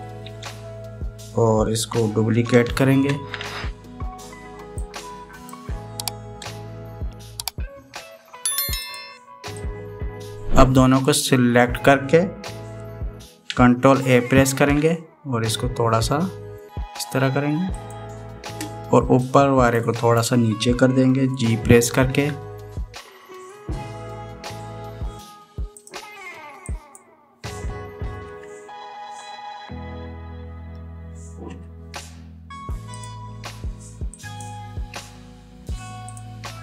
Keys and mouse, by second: 0.8 ctrl+r, 8.4 ctrl+r, 10.4-11.9 drag, 15.3 ctrl+a, 20.2 click, 22.9 g, 27.6 click, 29.0 g, 34.9 click, 35.7 z.